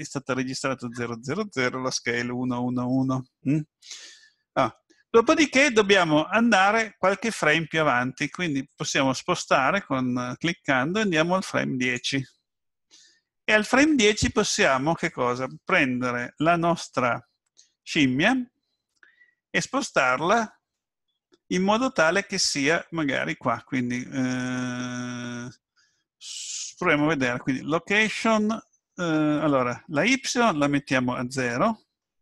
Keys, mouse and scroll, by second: 8.6 click, 29.9 click.